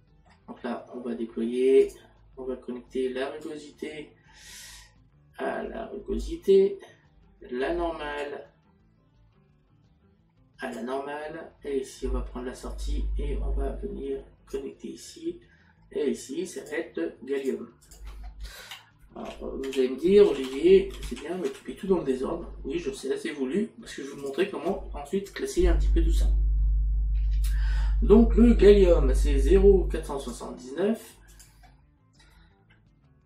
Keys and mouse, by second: 3.5 click, 16.6 click, 31.3 click.